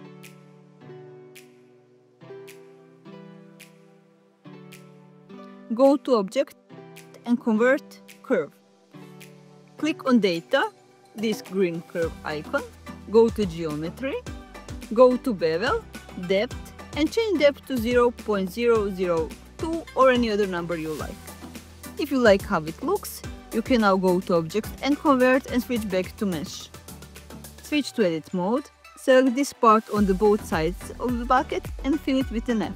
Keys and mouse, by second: 0.2 click, 2.3 Tab, 4.0 click, 7.7-10.1 drag, 11.6 click, 18.7-23.7 drag, 24.8-26.5 drag, 27.7 Tab, 31.2 ctrl+alt+shift+z, 31.4 alt+shift+click.